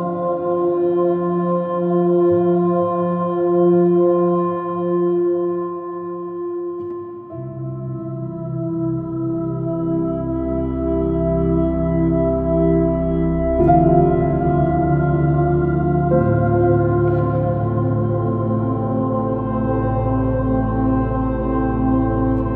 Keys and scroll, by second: 3.5 space, 5.0 j, 6.5 space, 8.0 super+Tab, 11.9 space.